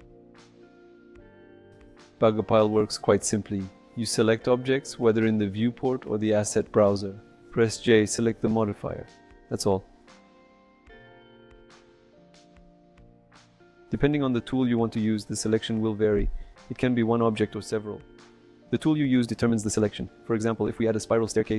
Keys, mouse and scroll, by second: 3.4 click, 4.4 ctrl+click, 5.0 click, 5.6 j, 11.5 a, 12.2 x, 19.1 j.